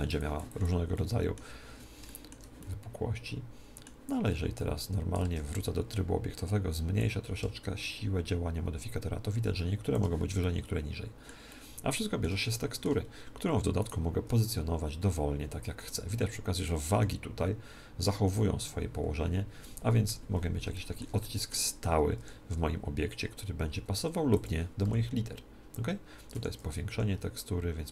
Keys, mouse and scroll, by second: 0.1-2.2 drag, 0.6-4.2 middle drag, 4.2 Tab, 4.8 Tab, 6.9-8.8 drag, 10.3-13.8 middle drag, 13.8-15.4 right drag, 14.2 r, 16.6-18.5 drag, 16.8 g, 20.6-23.1 middle drag, 22.1 r, 24.3-26.2 drag, 24.8 s, 26.8 s.